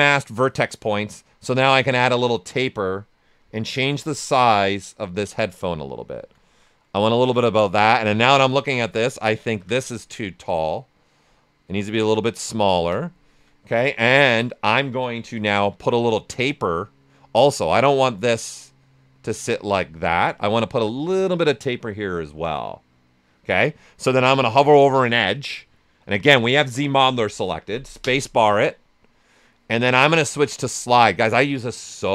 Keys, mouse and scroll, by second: 1.5-5.6 drag, 5.6 right click, 7.0 ctrl+click, 7.4 shift+right click, 8.7-10.0 ctrl+drag, 10.0-12.3 drag, 12.3 right click, 12.7 ctrl+click, 15.2 q, 16.8-20.1 right drag, 23.5 right click, 28.0 space.